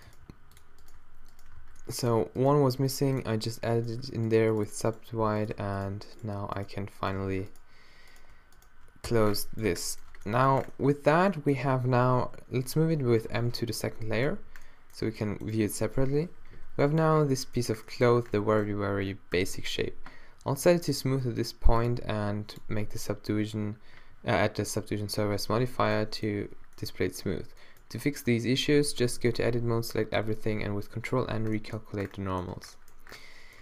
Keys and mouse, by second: 0.1 g, 1.6 alt+w, 2.5 g, 3.8 right click, 5.5 f, 6.7 shift+right click, 7.2 f, 9.1 f, 9.6 Tab, 10.3 Tab, 11.6 Tab, 13.2 m, 14.3 2, 15.0 a, 16.5 -, 19.3 t, 28.3 Tab, 28.8 a, 29.0 a, 30.2 ctrl+n, 31.2 t, 32.5 Tab.